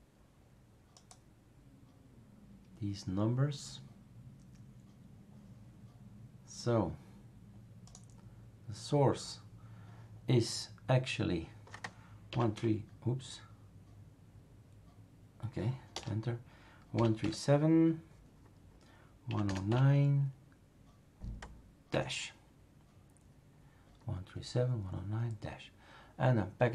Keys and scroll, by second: 12.3 typing, 12.5 Return, 15.9-17.9 typing, 19.0-20.2 typing, 21.9 BackSpace, 21.9 -.